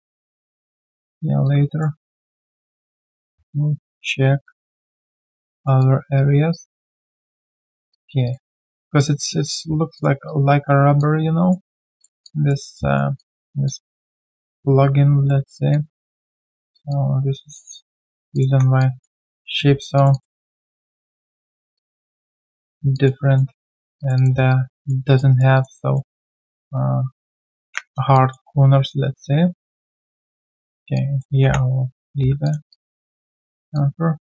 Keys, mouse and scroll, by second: 0.8 alt+middle click, 1.1 alt+scroll down 1, 1.4 alt+click, 1.9 alt+middle click, 2.2 alt+click, 5.0 alt+click, 5.5 alt+middle click, 5.8 alt+click, 7.0 alt+middle click, 7.4 right click, 7.9 alt+click, 8.2 alt+click, 9.4 alt+right click, 10.2 alt+click, 11.6 alt+right click, 12.2 alt+click, 12.8 alt+right click, 13.1 alt+click, 15.2 alt+middle click, 15.7 alt+click, 16.9 alt+click, 18.5 1, 18.8 alt+click, 19.3 right click, 19.6 q, 20.1 double click, 21.1 shift+click, 21.7 alt+click, 22.9 alt+click, 23.2 alt+middle click, 24.0 shift+click, 24.1 shift+double click, 24.5 alt+click, 25.0 alt+middle click, 25.3 alt+right click, 25.5 alt+click, 25.8 alt+middle click, 26.1 alt+click, 27.5 ctrl+b, 28.1 alt+click, 30.9 alt+click, 31.4 3, 31.8 right click, 32.6 q, 32.7 alt+click, 33.1 alt+right click, 33.4 alt+middle click, 33.7 alt+click.